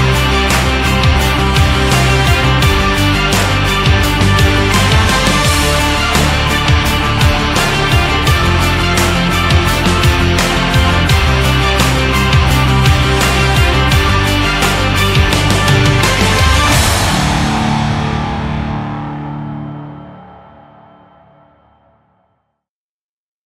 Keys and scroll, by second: 6.5 ctrl+z.